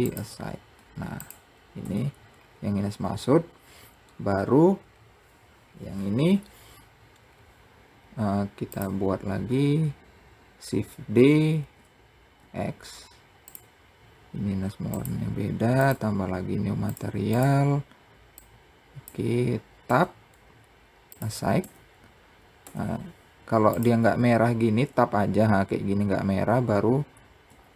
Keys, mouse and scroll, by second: 1.2 Tab, 1.9-2.4 scroll down 1, 3.1-5.1 scroll up 2, 5.1-5.8 scroll down 3, 6.7-7.4 scroll up 2, 7.4-7.7 scroll down 1, 8.2 click, 11.0 shift+d, 14.3-16.4 drag, 16.7 click, 19.3 Tab, 20.5 click, 21.0 Tab, 22.1 Tab, 23.1 click, 26.9 a.